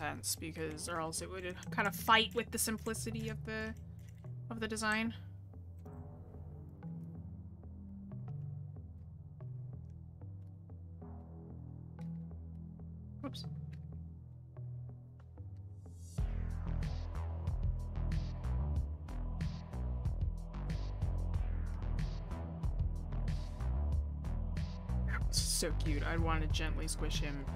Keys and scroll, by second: 13.2 ctrl+z, 21.5 ctrl+z.